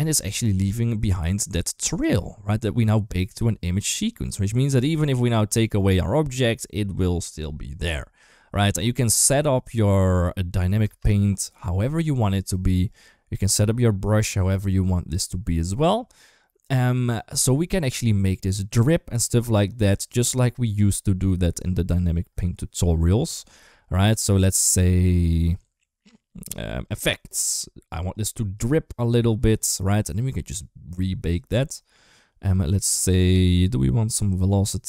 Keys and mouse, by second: 0.0 space, 10.6 space, 16.9 click, 21.6 click, 26.6 click, 27.9 click, 28.4 click.